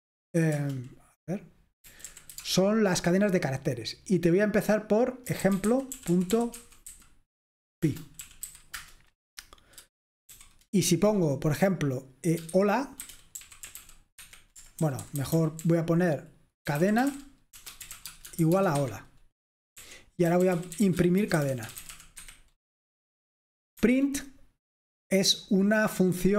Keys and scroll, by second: 0.6 Return, 1.7-2.8 typing, 5.2-10.9 typing, 12.5-13.8 typing, 14.9-15.4 typing, 16.8-22.5 typing, 18.8 Escape, 23.8-24.8 typing, 26.3 typing.